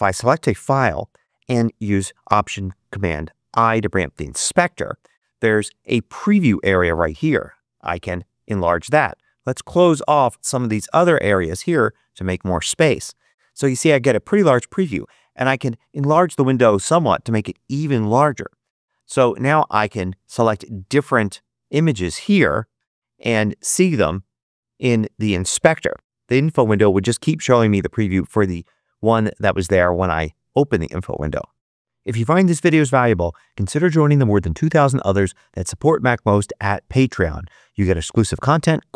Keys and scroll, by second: 3.4 alt+super+i.